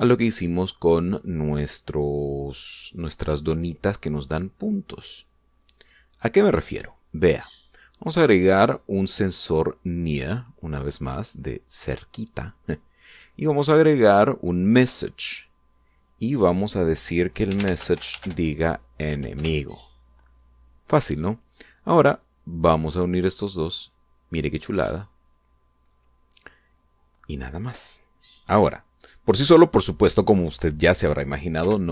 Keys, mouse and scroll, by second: 3.2 middle click, 4.1 scroll up 1, 4.9 click, 5.8-7.1 middle drag, 7.9 click, 10.6 click, 13.5 click, 15.4 click, 16.5 click, 18.1-19.7 typing, 19.9 Return, 23.2-25.7 drag, 28.7 scroll down 2, 29.2-30.2 middle drag.